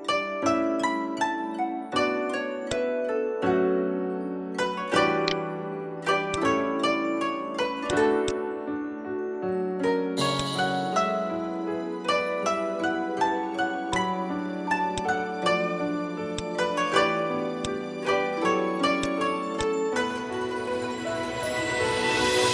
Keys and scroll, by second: 4.4 v, 12.2 v, 15.1 space.